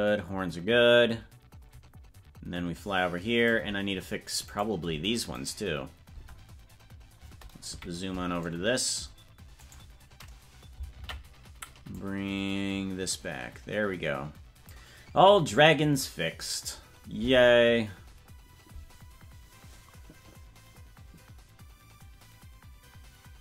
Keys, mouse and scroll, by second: 4.6 right click, 5.5 right click, 6.1 Tab, 7.7 KP_Decimal, 9.6-10.9 right drag, 10.9 ctrl+l, 11.9-14.6 drag.